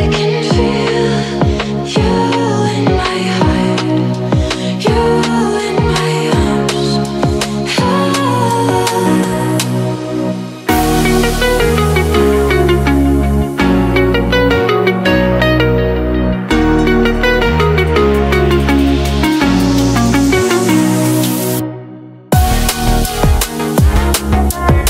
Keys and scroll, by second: 13.1 Down, 18.7 space.